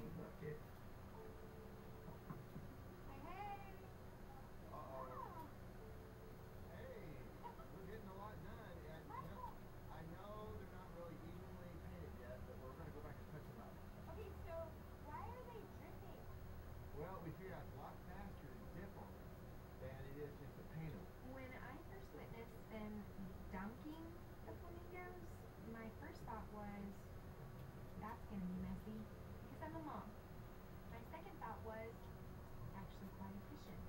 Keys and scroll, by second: 5.7 [.